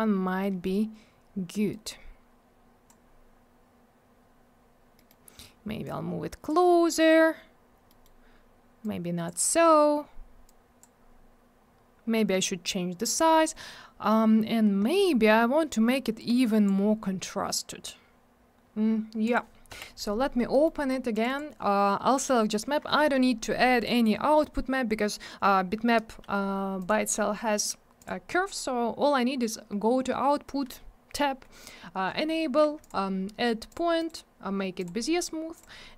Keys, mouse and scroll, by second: 0.4 middle click, 1.7 click, 4.9 middle click, 5.0 middle click, 5.8 click, 7.8 middle click, 8.0 middle click, 8.8 click, 10.4 click, 15.2 middle click, 15.3 middle click, 16.2 click, 19.2 click, 19.3 click, 19.7 m, 20.5 middle click, 20.6 middle click, 20.8 middle click, 20.9 middle click, 21.1 click, 21.2 double click, 21.2 click, 21.3 click, 26.8 click, 26.8 click, 28.0 click, 28.0 click, 32.8 click, 32.9 click, 33.7 click, 33.7 click, 34.0 right click, 34.0 double right click, 34.8 click, 34.8 click, 35.5 click, 35.6 click.